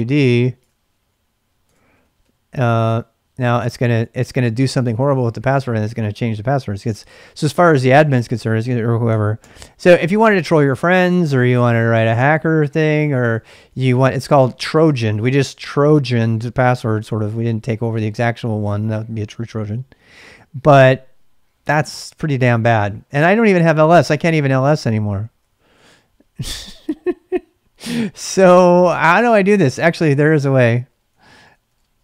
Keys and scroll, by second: 0.0-2.2 typing, 2.9 Return, 9.4 ctrl+c, 10.0 ctrl+c, 10.5 Return, 11.3 ctrl+c, 13.1-14.3 typing, 18.2-19.0 typing, 23.2-26.9 typing, 24.7 Return, 30.5-32.0 typing.